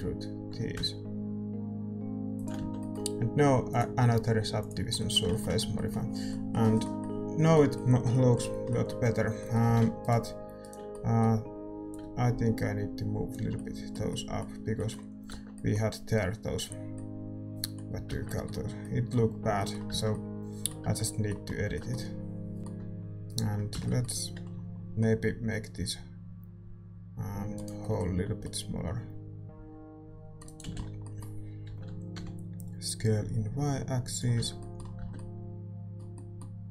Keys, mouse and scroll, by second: 1.0 e, 2.5 Tab, 2.7-4.6 middle drag, 4.6 click, 4.9 right click, 5.6 Tab, 11.9-15.3 drag, 11.9 right click, 11.9 a, 15.3 Tab, 15.3 a, 18.1 Tab, 22.6 ctrl+s, 22.6-24.9 right drag, 22.6 a, 23.5-27.1 middle drag, 23.7 z, 24.9 c, 27.7-30.6 middle drag, 29.4 c, 30.6-32.7 right drag, 30.6 z, 30.7-33.8 middle drag, 31.7 s, 34.3 Tab, 34.5-36.7 middle drag, 35.1 Tab.